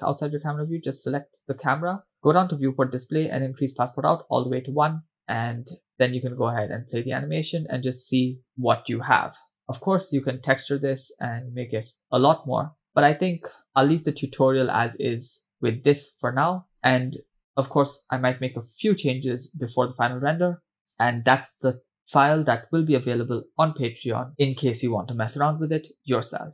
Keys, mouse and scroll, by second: 0.0-0.7 scroll down 1, 1.0 click, 2.3 click, 2.6-3.5 scroll down 2, 3.5-4.4 drag, 5.9-6.5 scroll up 2, 5.9 space, 7.2 space, 8.5-9.0 scroll down 1, 11.7-12.8 scroll down 3, 12.0-12.8 scroll up 2, 12.8-13.5 scroll up 2, 13.6-14.0 scroll down 1, 14.2 space, 16.8-17.6 scroll down 1, 17.6 space.